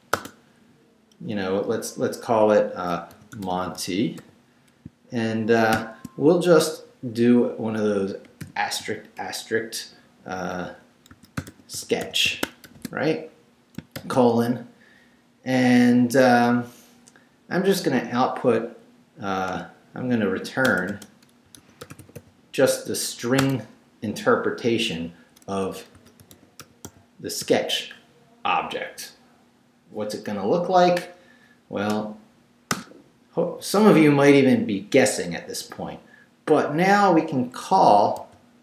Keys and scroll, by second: 0.1 space, 2.9-5.7 typing, 8.4 shift+8, 10.9-12.6 typing, 13.9 shift+;, 19.5 Return, 21.2-23.4 typing, 25.7-27.4 typing, 31.9 Return, 38.2-38.6 typing.